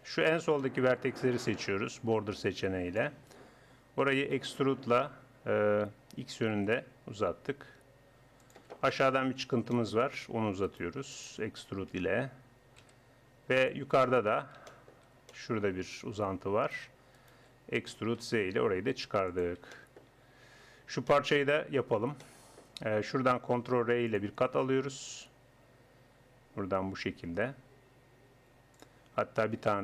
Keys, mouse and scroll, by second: 1.2 a, 1.9 b, 4.4 e, 8.9-10.7 middle drag, 10.7-12.1 right drag, 11.9 e, 13.1 middle click, 16.7-18.9 drag, 17.9 e, 19.1 middle click, 19.7-24.1 drag, 23.7 ctrl+r, 29.7 ctrl+r.